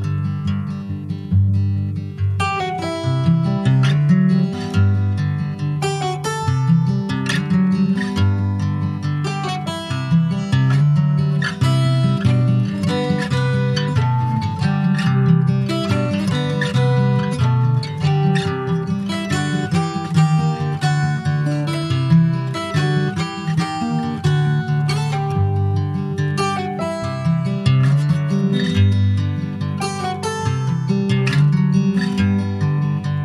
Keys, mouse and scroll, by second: 0.4 alt+middle click, 1.1 Tab, 1.3-1.7 scroll up 3, 1.7 shift+middle click, 2.4 ctrl+r, 3.7-4.7 middle drag, 4.7 click, 5.1 alt+middle click, 6.3 alt+middle click, 7.2 ctrl+s, 7.6 click, 8.5 ctrl+z, 9.1 alt+shift+click, 10.4 alt+shift+click, 11.3 click, 17.0 ctrl+b, 23.2 click, 25.2-28.3 drag, 29.0-32.1 drag, 32.1 Tab, 32.3 click, 32.6 scroll down 4, 32.8 middle click.